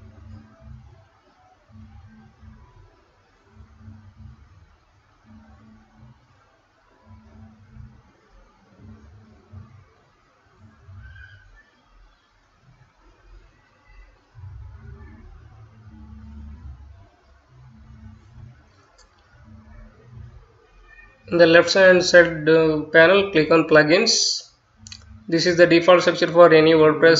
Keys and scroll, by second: 8.2 Return, 8.6-16.1 typing.